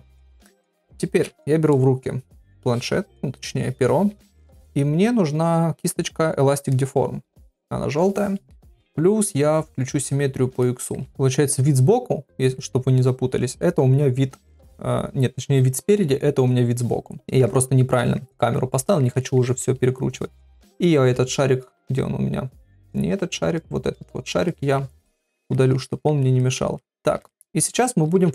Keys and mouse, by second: 10.6 middle click, 11.1 KP_1, 11.1 KP_3, 11.1 ctrl+middle click, 17.2 middle click, 18.0 middle click, 18.4 ctrl+middle click, 18.8 middle click, 19.2 shift+middle click, 19.6 middle click, 24.5 middle click, 25.2 ctrl+middle click, 25.6 middle click, 25.9 shift+middle click, 26.4 ctrl+middle click, 26.8 middle click, 27.3 shift+middle click.